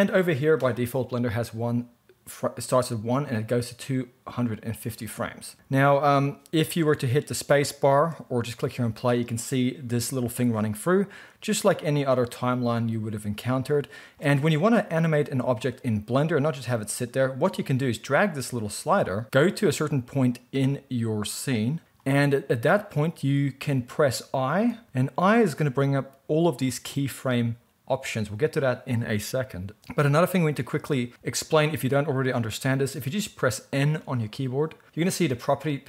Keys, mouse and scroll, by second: 7.9 space, 10.2 space, 24.6 i, 33.9 n.